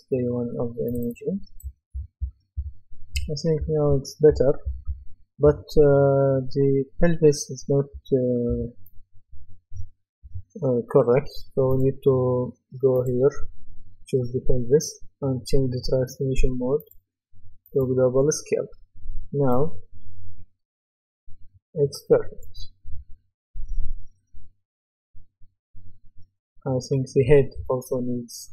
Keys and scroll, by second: 1.4-4.8 typing, 7.9-8.5 typing.